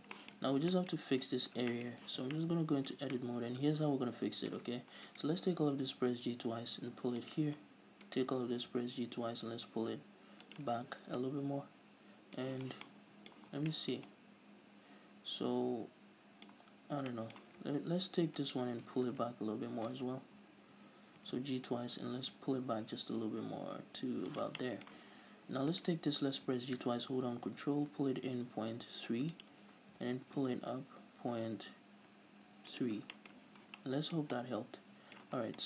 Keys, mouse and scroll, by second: 2.3 z, 2.4-5.1 middle drag, 3.0 Tab, 5.1 alt+right click, 5.8 g, 7.4 click, 8.2 alt+right click, 8.7 g, 10.6 click, 10.8 z, 11.1 scroll down 2, 11.2-18.5 middle drag, 12.6 z, 13.5 a, 16.7-17.2 scroll up 2, 18.5 alt+right click, 19.1 f, 20.1 ctrl+z, 21.3 g, 24.7-25.8 middle drag, 25.8 alt+right click, 26.4 g, 29.6 ctrl+click, 30.1 g, 32.9 ctrl+click, 33.1 scroll down 1, 33.2 middle click, 33.5 z, 33.7 scroll down 1, 33.9-35.6 middle drag, 34.4 Tab, 35.5 scroll down 2.